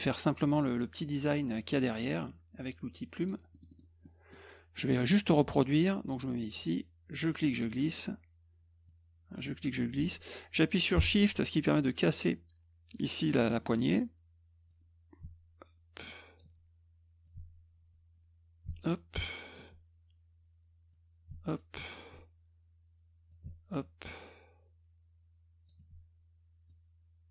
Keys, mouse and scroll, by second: 3.2 click, 3.5 middle click, 3.7 middle click, 4.1 middle click, 4.8 middle click, 5.4 middle click, 7.3 click, 8.9-13.5 drag, 14.7-16.4 drag, 17.3-19.5 shift+drag, 20.9 click, 23.3-25.7 shift+drag, 26.7-27.3 drag.